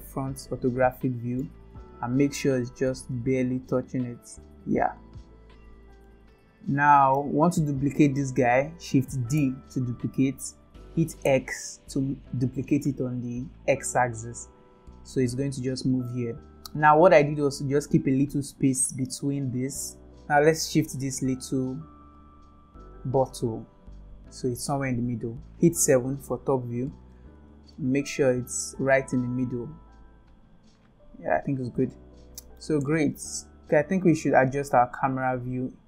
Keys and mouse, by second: 0.9-1.4 shift+middle drag, 2.1 g, 6.0-7.1 middle drag, 9.4 shift+d, 20.5 click, 22.6-24.8 drag, 25.8 KP_7, 27.7-28.1 shift+middle drag, 30.1 click, 31.9-32.5 middle drag.